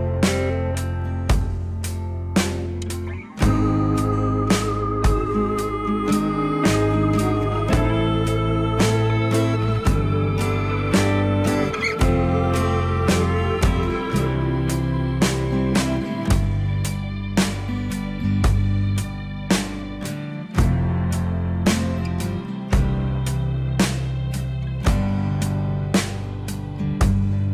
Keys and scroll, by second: 17.6 F4.